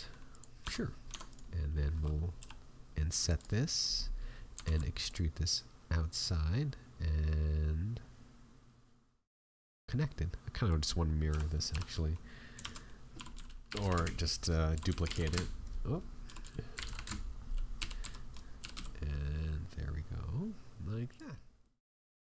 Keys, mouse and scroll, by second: 0.6 Tab, 1.1 Tab, 1.2 right click, 3.3 click, 3.7 middle click, 4.1 scroll down 4, 4.6 alt+e, 11.3 a, 11.7 l, 12.5 shift+d, 13.1 r, 21.3-21.8 scroll down 3, 21.6 middle click, 21.9-22.3 scroll up 3, 22.2 Tab.